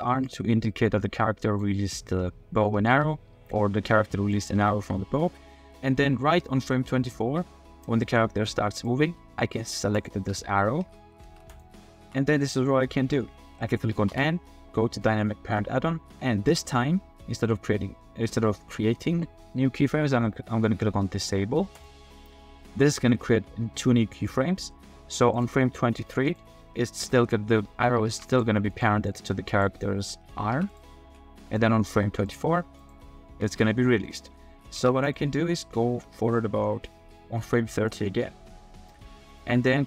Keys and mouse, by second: 0.3-1.6 drag, 2.6 click, 4.3-5.3 drag, 5.3-7.6 middle drag, 7.6-8.9 drag, 9.9 click, 11.2 ctrl+Tab, 11.5 click, 12.0 g, 12.3-14.1 drag, 14.1 n, 21.8-25.4 drag, 26.9 click, 28.1 ctrl+Tab, 28.7 click, 29.5 click, 30.1-30.4 drag, 30.5 ctrl+Tab, 30.7 click, 31.0 r, 32.8 middle click, 33.3 r, 34.8 ctrl+Tab, 35.0 click, 37.9 click, 39.4-39.8 middle drag.